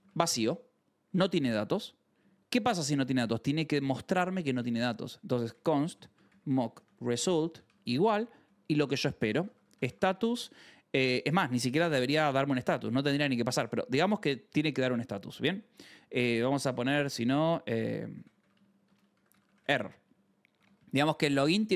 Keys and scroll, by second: 0.9 Right, 1.3 Return, 2.0 BackSpace, 2.8 Right, 3.0 Return, 5.1-11.2 typing, 15.4 Right, 15.6 BackSpace, 17.9-21.7 typing.